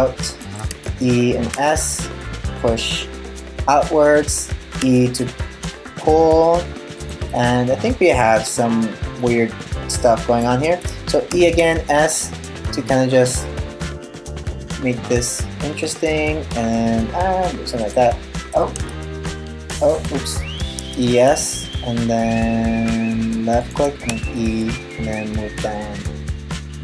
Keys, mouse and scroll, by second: 0.3 e, 4.4 e, 6.9 middle click, 10.9 e, 18.4 e, 19.9 super+z, 20.4 e, 23.7 e.